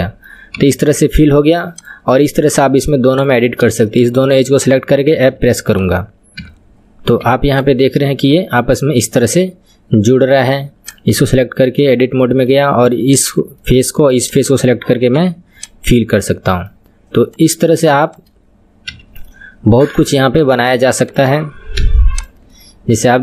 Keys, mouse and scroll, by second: 0.6 KP_3, 1.8 click, 2.2-3.2 middle drag, 3.2 click, 5.4 f, 5.8 click, 6.4 KP_3, 7.2 Tab, 7.6 click, 8.0-10.9 middle drag, 10.9 click, 11.2 Tab, 11.9-13.2 middle drag, 13.2 click, 13.6-14.3 middle drag, 14.3 shift+click, 15.2 f, 15.7 click, 15.9-17.3 middle drag, 17.3 click, 18.9 f, 19.3-20.4 middle drag, 20.4 click, 21.8 f, 22.2 click, 22.5-23.2 middle drag.